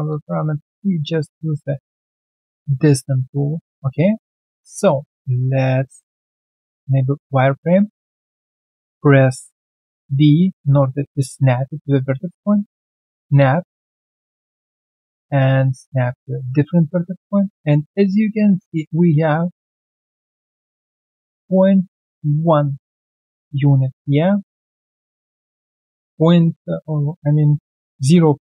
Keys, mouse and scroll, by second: 3.6 alt+right click, 3.9 alt+middle click, 6.6 alt+right click, 9.9-11.0 typing, 13.6 alt+click, 14.0 alt+middle click, 14.5 alt+right click, 15.2-16.8 typing, 23.5 alt+right click, 23.9 alt+middle click, 24.3 q, 24.7 alt+click, 25.1 alt+middle click, 27.3 alt+right click.